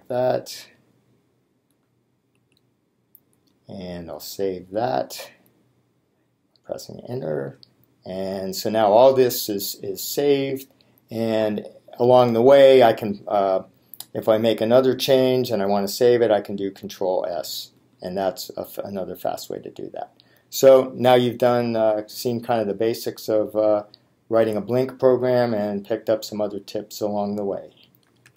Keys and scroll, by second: 1.8 r, 2.5 o, 3.4 g, 4.9 s, 17.9 s.